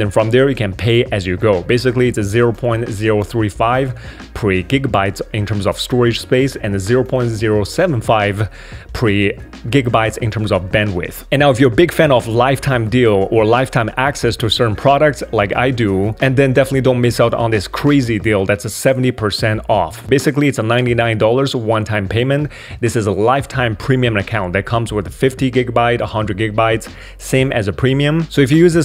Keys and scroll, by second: 11.2 super+3.